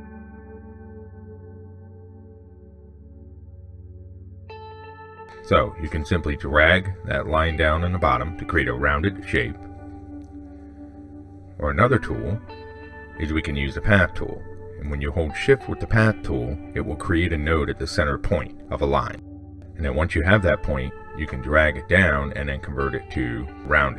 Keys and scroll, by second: 11.4 ctrl+z, 16.0 ctrl+z.